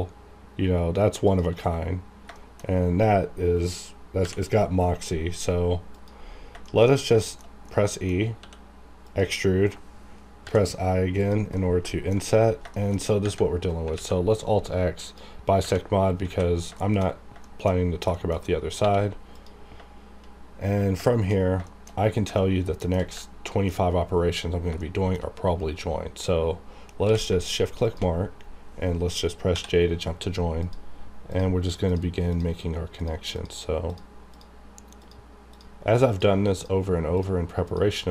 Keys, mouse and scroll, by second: 1.3 shift+click, 2.3 shift+middle click, 2.7-3.0 scroll up 1, 5.9 click, 6.3 scroll down 1, 6.6 shift+middle click, 6.9 scroll down 1, 7.2 shift+middle click, 8.4 e, 9.0 click, 9.3-10.4 scroll up 1, 11.2 click, 11.5 middle click, 12.1-13.2 alt+scroll down 3, 12.7 shift+middle click, 13.5-13.8 scroll down 1, 13.9 alt+x, 15.0 click, 15.6 scroll up 1, 16.3 alt+a, 16.8 shift+middle click, 16.9-17.3 shift+scroll down 2, 17.4 shift+middle click, 18.1 shift+middle click, 18.3-18.8 shift+scroll up 3, 18.8 1, 19.3 click, 20.6-20.9 scroll up 1, 21.1 shift+middle click, 21.3 shift+scroll down 2, 21.6 shift+middle click, 22.4 shift+middle click, 23.2-24.5 ctrl+middle drag, 24.5 scroll up 2, 24.8 shift+middle click, 27.0 q, 27.8 shift+click, 29.5 j, 30.6 click.